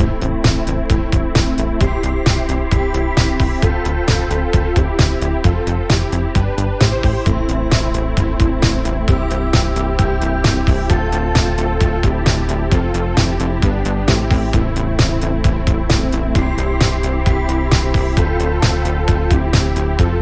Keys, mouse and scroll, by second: 0.4 scroll down 1, 0.6-2.6 middle drag, 2.9 KP_1, 3.6-5.0 scroll up 1, 5.0-5.6 shift+middle drag, 5.6 drag, 7.5 click, 8.1 KP_3, 8.7 scroll up 2, 12.4 click, 13.5 shift+s, 14.5 shift+s, 18.1 drag, 18.4 click, 19.1 r.